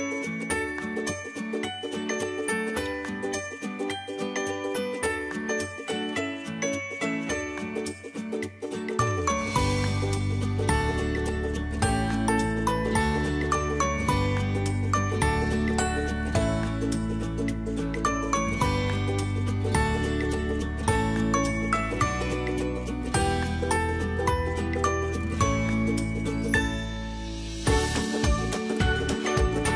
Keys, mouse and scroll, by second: 2.5 click, 5.5-7.6 drag, 7.6-11.8 drag, 11.8 space, 12.2 alt+click, 13.9 alt+space, 14.2 alt+click, 14.4 alt+space, 14.5 alt+click, 14.6 alt+space, 15.3 alt+click, 15.5 alt+space, 16.3-20.4 drag, 20.4 space, 20.7 ctrl+click, 21.5 space, 22.3 alt+click, 24.1-29.7 shift+drag.